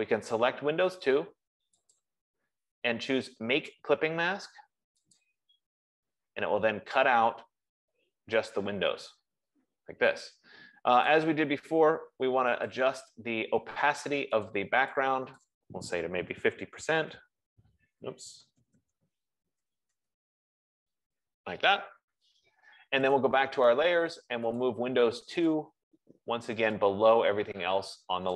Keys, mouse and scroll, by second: 0.1 click, 2.3 click, 5.7 click, 11.4 click, 13.1 click, 14.7 click, 17.0-17.4 typing, 18.6-21.5 typing, 23.6 click, 24.8-25.5 typing, 25.0 click, 26.2 click.